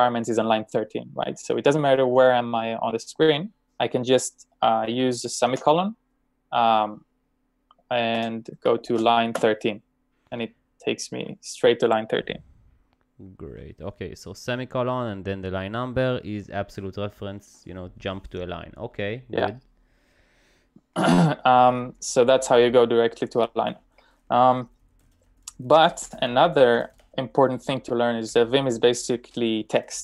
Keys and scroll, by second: 1.6 typing, 5.5 :, 8.2 2, 8.6 BackSpace.